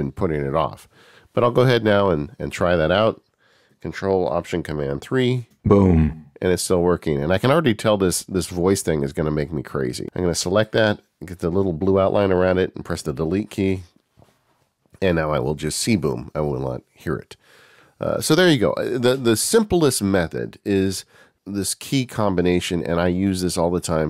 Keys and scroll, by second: 5.2 ctrl+alt+super+3.